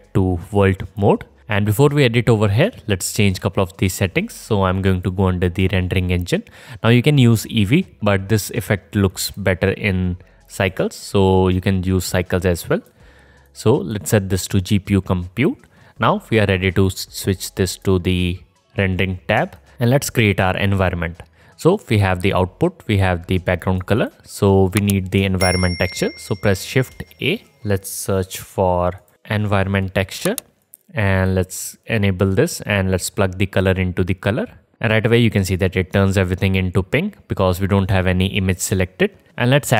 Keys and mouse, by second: 4.9 click, 4.9 middle click, 4.9 right click, 9.2-17.8 middle drag, 22.0-24.3 middle drag, 22.1-24.3 drag, 22.1-24.3 right drag, 25.4 shift+click, 26.4 shift+click, 26.8 shift+a, 32.5-33.3 drag, 32.5-33.3 middle drag, 32.5-33.3 right drag, 34.2-39.3 middle drag, 39.3-39.7 drag.